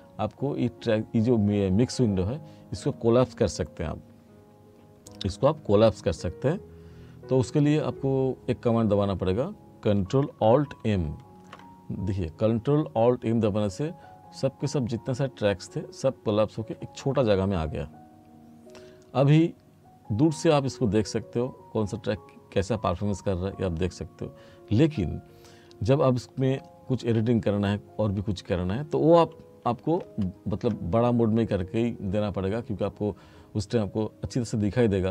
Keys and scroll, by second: 10.9 ctrl+m, 30.0 ctrl+m.